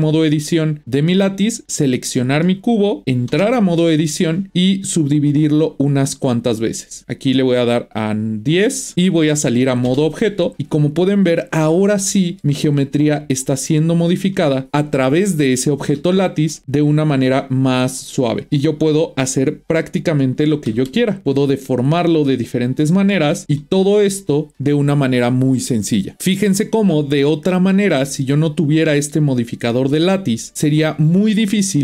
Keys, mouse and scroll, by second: 1.7 click, 2.4-3.3 middle drag, 3.3 Tab, 4.1 shift+middle click, 4.8-7.3 right drag, 7.3-8.9 drag, 8.9 Tab, 9.8 Tab, 10.6-12.7 middle drag, 12.7 drag, 15.3 click, 15.9 Tab, 16.5 middle click, 17.1 click, 20.6 g, 22.3-25.3 middle drag, 26.0 scroll down 1, 26.8 Tab, 27.7-30.6 middle drag, 30.6 click, 31.4-31.8 scroll up 1.